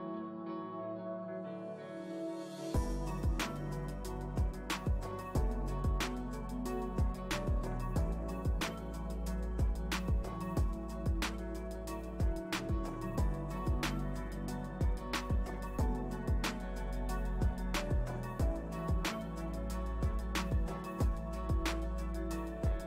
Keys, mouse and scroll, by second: 10.8-12.6 middle drag, 12.6-15.9 shift+drag, 15.9-16.9 middle drag, 16.9 click, 17.9-20.3 middle drag, 20.3-22.8 drag.